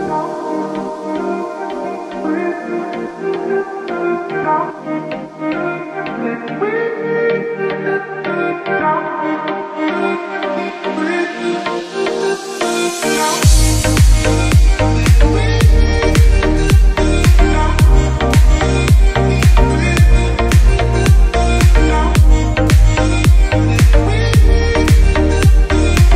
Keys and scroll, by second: 2.6 shift+F11, 3.9 Escape, 4.7 space, 4.9 Escape, 8.7 Escape, 9.7 g, 14.5 space, 14.9 Escape, 15.7 ctrl+r, 17.6 ctrl+r, 18.5 g, 20.7 space, 21.1 Escape, 23.1 ctrl+r, 24.8 F2, 25.9 g.